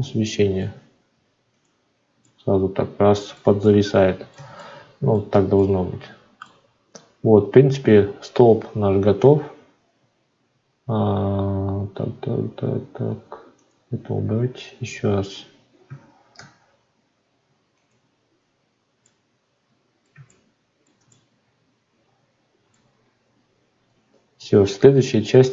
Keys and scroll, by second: 16.3 alt+v.